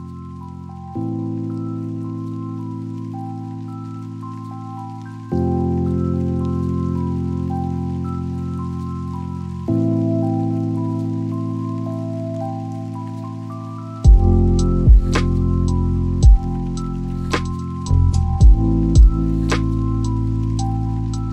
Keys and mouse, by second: 1.0 click, 1.2 shift+a, 5.8 click, 6.9 click, 9.1 click, 19.8 click, 20.5-21.3 drag.